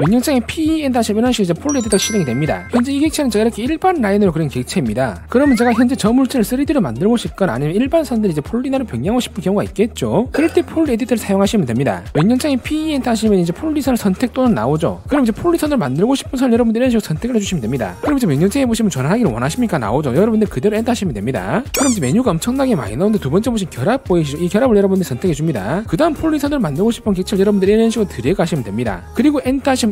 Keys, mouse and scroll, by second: 1.7 click, 3.1 click, 3.4 click, 3.7 click, 4.1 click, 4.5 click, 4.7 click, 12.9 e, 13.2 right click, 17.7 click, 25.6 click, 28.0 click, 28.7 click.